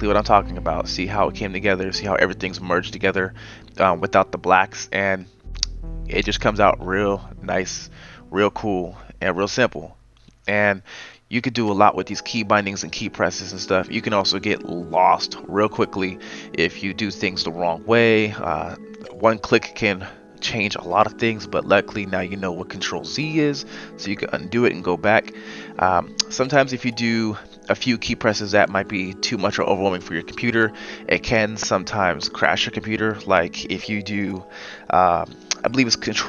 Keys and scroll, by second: 4.9 ctrl+z, 6.0-7.2 typing, 12.8 ctrl+z.